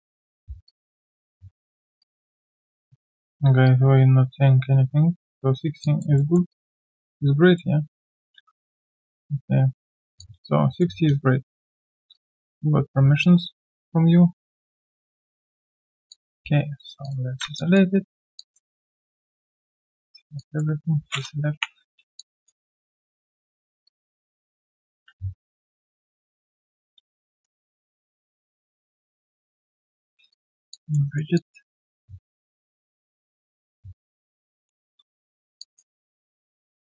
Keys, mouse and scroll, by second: 0.4 q, 0.4 Tab, 1.9 q, 2.0 shift+right click, 5.8 alt+click, 6.1 alt+middle click, 6.5 alt+click, 7.5 middle click, 8.3 ctrl+z, 10.2 alt+click, 10.8 alt+click, 12.0 alt+w, 12.1 shift+click, 13.2 alt+click, 14.8 middle click, 15.9 middle click, 16.1 alt+click, 16.5 right click, 16.5 q, 17.5 alt+click, 18.0-18.7 alt+scroll down 2, 18.3 alt+click, 18.7 alt+right click, 22.0 Delete, 22.1 alt+click, 22.9 right click, 23.8 double click, 25.1-27.5 typing, 27.4 right click, 28.3 double click, 28.9 shift+click, 31.0 alt+right click, 31.3 alt+click, 31.7 right click, 32.0 scroll down 1, 32.6 alt+right click, 33.9 w, 34.9 ctrl+1, 35.1 ctrl+right click, 35.6 alt+click, 36.0 alt+right click, 36.3 alt+click.